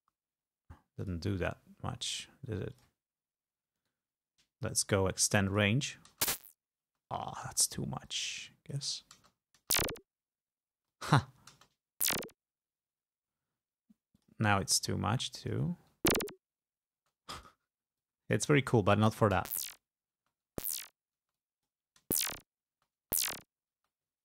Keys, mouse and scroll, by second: 1.1 click, 2.9 click, 3.9 right click, 5.6 click, 6.2 space, 8.2-9.2 drag, 9.2 space, 10.9 space, 11.0 click, 11.7 space, 13.1 space, 14.3 click, 14.9-16.0 drag, 16.1 space, 17.1 space, 17.5 click, 18.1-19.2 drag, 19.5 space, 20.3 space, 21.3 space, 21.4 click, 22.1 space, 22.8 space, 23.9 space.